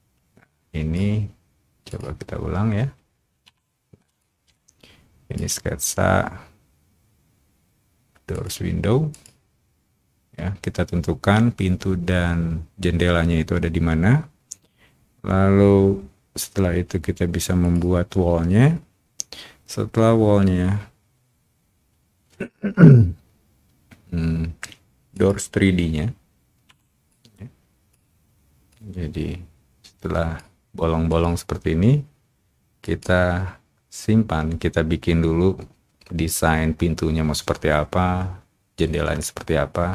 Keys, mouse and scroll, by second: 0.2 o, 1.8 click, 3.5 o, 4.2-5.3 shift+drag, 8.3 shift+click, 9.1 click, 17.6 click, 25.1 click, 26.7 o, 27.0 click, 28.6-30.3 drag, 31.0 click, 32.7 click.